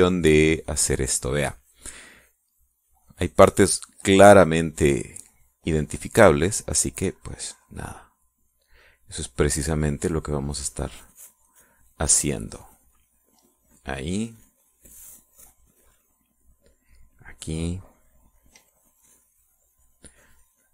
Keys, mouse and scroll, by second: 3.6-9.5 drag, 13.6-18.1 drag, 18.3-20.5 drag.